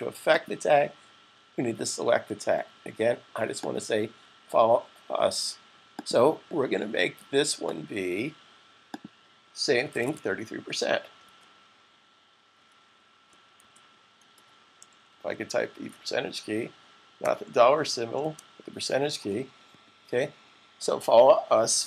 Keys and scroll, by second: 9.2 typing, 10.5 typing, 11.8 typing, 12.9-13.6 typing, 15.1 typing, 16.5 typing, 17.6 typing, 21.3 s.